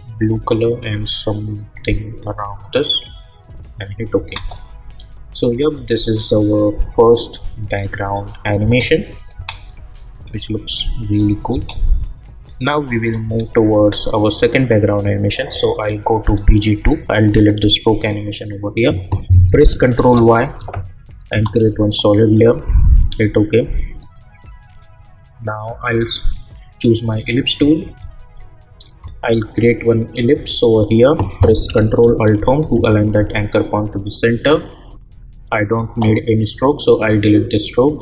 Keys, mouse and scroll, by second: 4.2 space, 8.6 space, 9.1 click, 9.3 space, 11.5 space, 12.2 click, 13.2 space, 16.2 click, 19.9 ctrl+y, 21.3 Return, 23.1-32.6 drag, 32.6 ctrl+alt+Home, 35.4-38.0 drag.